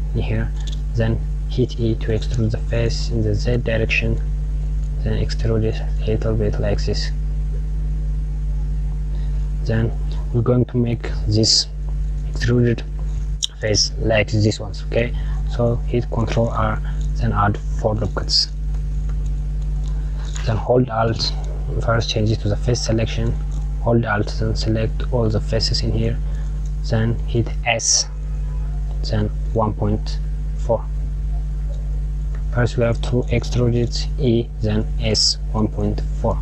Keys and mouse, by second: 1.3 e, 15.7 r, 19.2 KP_Add, 24.2 click, 27.6 s, 33.4 e.